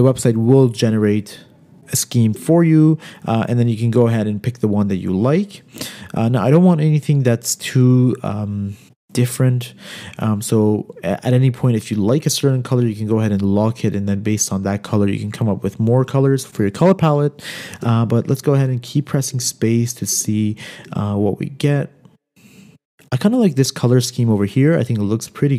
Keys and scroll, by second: 2.7 space, 5.5 space, 8.2 space, 18.2 space, 18.8 space.